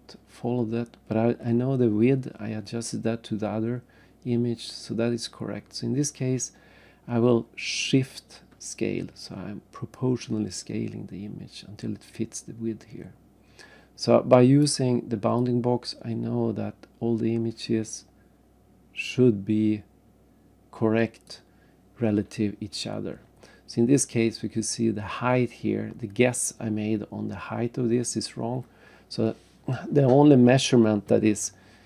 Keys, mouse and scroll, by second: 9.9 shift+click, 15.4 click.